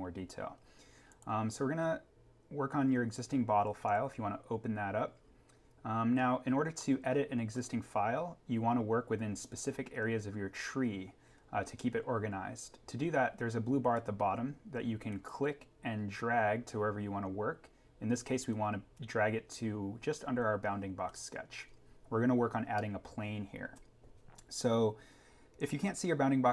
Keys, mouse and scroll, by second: 1.0 click, 6.7-7.7 scroll up 1, 15.2 click, 23.1 scroll down 1.